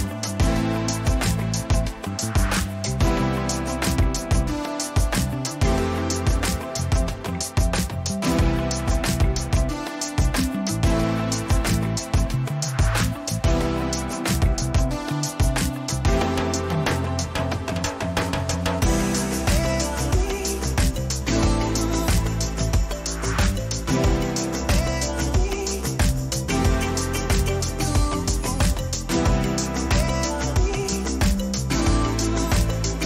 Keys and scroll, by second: 4.1 ctrl+-, 10.3 ctrl+z, 11.6 ctrl+t, 16.8 Return, 20.0 ctrl+-.